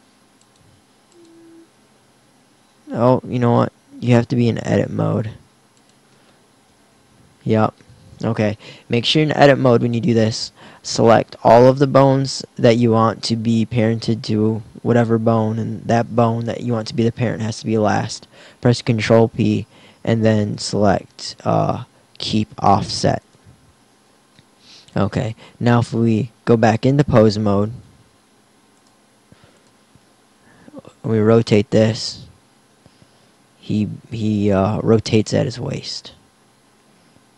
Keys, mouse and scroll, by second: 3.5 click, 6.5 ctrl+p, 25.9 Tab, 27.7 Tab, 30.9 r, 35.6 KP_1, 36.3 r.